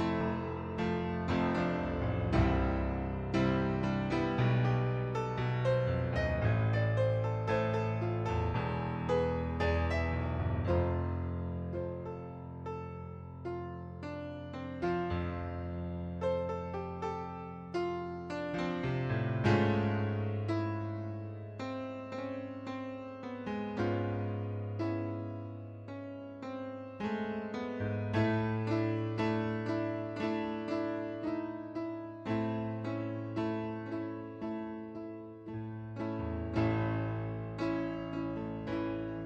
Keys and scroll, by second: 25.0 ctrl+d, 36.6 ctrl+d.